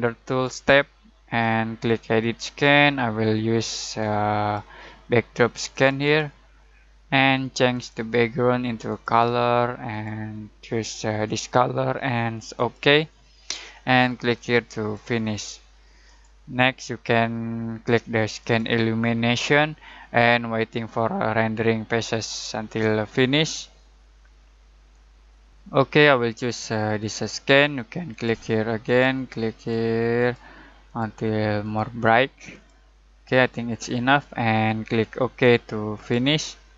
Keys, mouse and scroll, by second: 0.0-16.0 drag, 18.4 click, 27.3 click, 30.8 click, 35.4-36.7 drag.